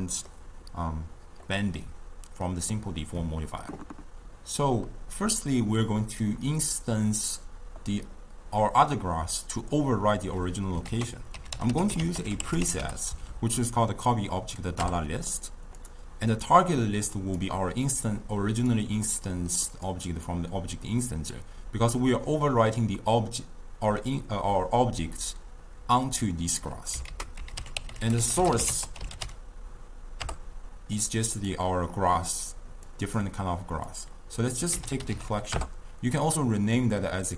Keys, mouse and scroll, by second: 4.9-7.9 middle drag, 10.9 ctrl+a, 13.3 Down, 16.6 drag, 18.1 click, 19.1-19.9 middle drag, 19.9-22.0 drag, 22.0-25.1 middle drag, 27.1 ctrl+a, 27.9 l, 32.9-35.1 drag, 35.1 l, 37.3 click.